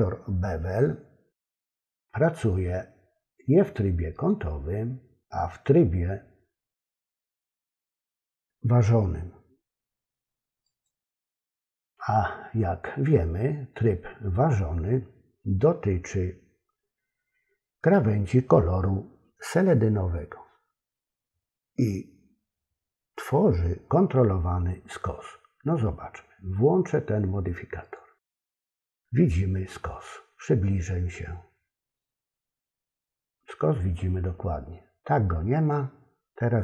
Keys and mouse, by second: 4.1-10.9 drag, 27.9 click, 35.6 click.